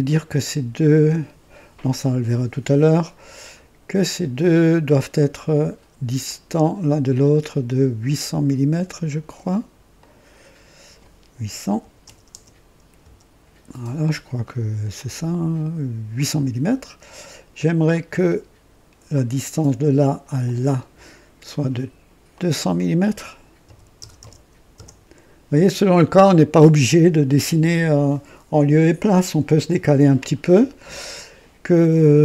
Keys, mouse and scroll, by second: 3.9 click, 6.2 click, 9.9 click, 11.6 KP_8, 12.0 KP_0, 12.4 KP_0, 12.9 Return, 14.9 click, 16.1 click, 16.8 typing, 17.8-18.9 drag, 19.1 click, 20.3 click, 22.2 click, 23.6-24.7 typing, 24.7 KP_Enter.